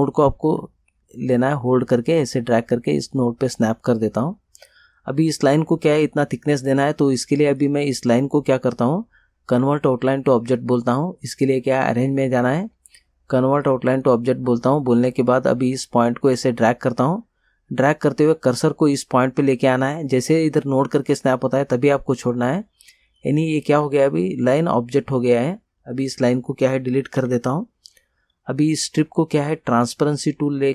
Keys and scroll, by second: 27.2 Delete.